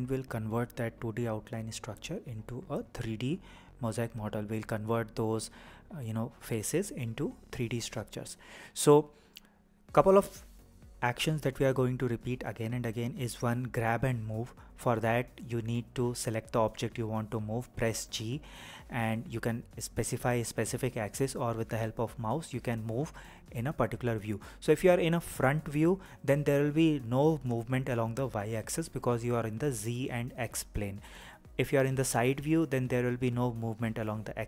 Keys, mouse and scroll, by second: 3.4-4.4 scroll down 2, 4.4-5.8 shift+middle drag, 16.2 g.